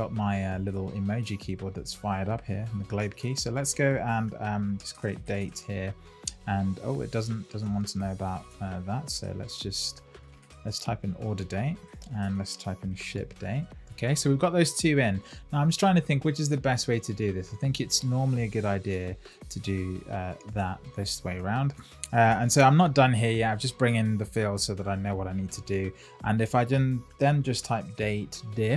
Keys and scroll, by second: 11.7 Return, 13.5 Return, 18.8 super+x, 20.5 super+v, 22.3 Return.